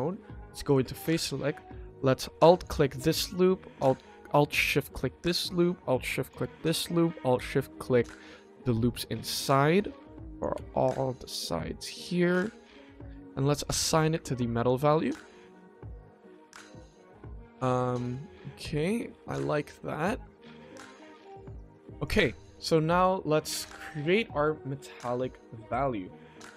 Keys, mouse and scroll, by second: 0.6 click, 1.1 middle click, 1.6 middle click, 2.5 alt+click, 3.2 middle click, 4.5 alt+shift+click, 5.2 middle click, 6.2 alt+shift+click, 6.5 middle click, 7.9 alt+shift+click, 8.9 middle click, 10.3 alt+shift+click, 10.7 middle click, 11.3 middle click, 12.3 alt+shift+click, 13.6 click, 14.1 Tab, 14.6 click, 14.8-15.8 middle drag, 16.8 click, 17.6 click, 18.0-18.9 middle drag, 19.2 drag, 19.5-20.1 scroll down 2, 20.1-21.1 scroll up 1, 21.1 click, 21.1 scroll up 1, 21.9 click, 23.0 middle click, 24.1 click, 25.6-26.5 shift+middle drag.